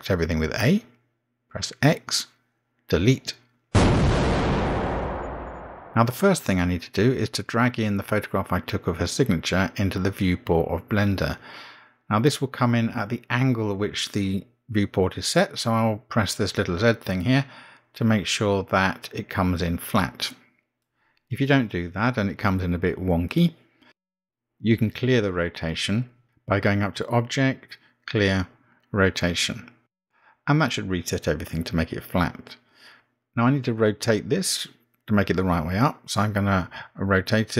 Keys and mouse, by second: 1.5 a, 2.7 x, 9.6 a, 9.6 x, 10.9-12.2 middle drag, 12.8 middle click, 27.5-31.3 drag, 34.8 click, 36.1 r.